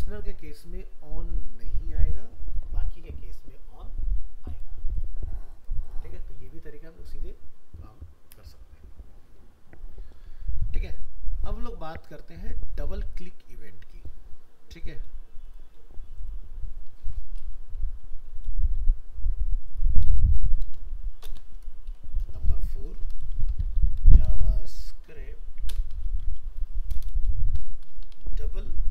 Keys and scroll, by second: 16.9 alt+f, 17.1 alt+移, 20.2 alt+Up, 21.2 ctrl+shift+n.